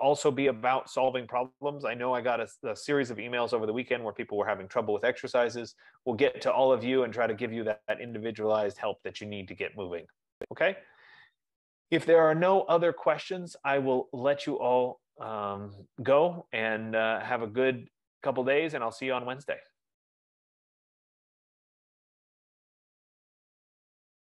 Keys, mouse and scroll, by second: 0.4 F15.